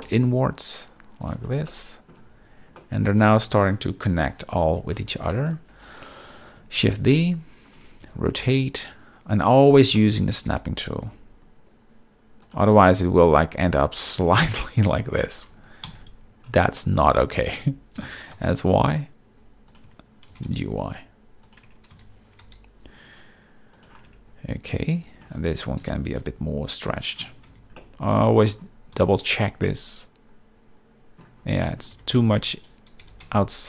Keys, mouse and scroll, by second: 1.2 shift+click, 1.7-2.1 middle drag, 2.8 middle drag, 4.1 KP_7, 4.7 z, 5.3 shift+middle click, 6.8 shift+d, 7.7 ctrl+click, 8.0 r, 9.5 ctrl+click, 9.9 shift+middle click, 10.5 g, 12.4 shift+click, 13.3 r, 14.0-15.0 drag, 15.9 ctrl+z, 17.5 Tab, 17.9 s, 18.3 y, 19.6 click, 19.8 Tab, 20.3 g, 20.5 y, 21.4 click, 21.6 Tab, 21.9 s, 22.4 y, 23.7 click, 24.1 Tab, 24.9 Tab, 25.8 s, 26.2 y, 27.0 click, 27.2 Tab, 27.5 z, 27.8-28.2 middle drag, 28.9 z, 29.6-31.2 middle drag, 31.6 middle click, 31.9 g, 32.1 x, 32.5 right click, 33.0 g, 33.2 x.